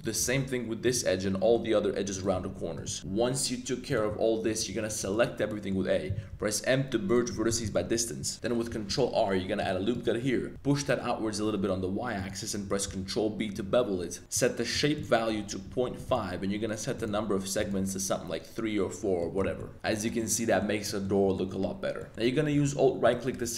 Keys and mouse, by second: 0.2-4.9 typing, 1.2 middle click, 2.1 click, 2.8 click, 5.1 shift+click, 5.3 middle click, 5.5 middle click, 6.3 m, 7.7 middle click, 8.8 super+r, 9.9 click, 10.2 middle click, 10.5 g, 10.8 y, 12.1 click, 12.8 super+b, 14.4 click, 14.9-16.1 drag, 17.0 click, 17.7 click, 19.2 middle click, 19.4 Tab, 19.6 middle click, 20.2-20.6 middle drag, 20.8 middle click, 21.3 shift+drag, 22.0 middle click, 22.1 a, 23.0 alt+click, 23.4 z.